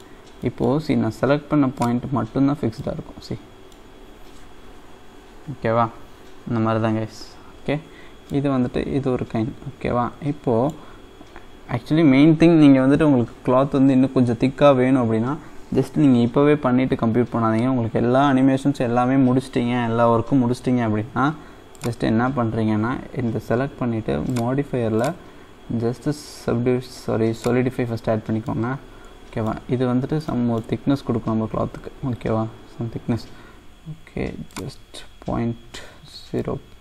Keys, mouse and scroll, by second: 0.1-0.4 scroll down 2, 0.4-1.8 middle drag, 1.8 click, 2.4-2.9 scroll up 1, 2.9-5.9 middle drag, 8.2 scroll up 1, 8.3-11.0 middle drag, 11.0-12.3 scroll up 1, 13.1-14.0 scroll up 1, 21.7-28.1 drag, 28.2 scroll up 1, 28.4-33.3 middle drag, 34.5-36.4 drag, 36.4-36.8 middle drag.